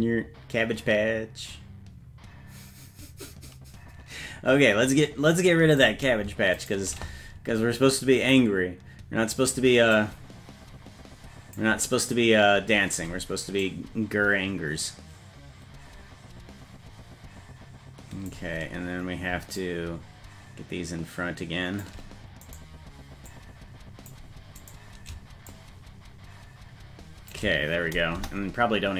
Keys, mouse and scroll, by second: 6.7 shift+right click, 10.0-11.6 drag, 13.7-18.3 drag, 19.6-21.9 shift+drag, 22.5 right click, 23.3 click, 24.7 right click, 25.5-27.4 shift+drag, 28.2 KP_0.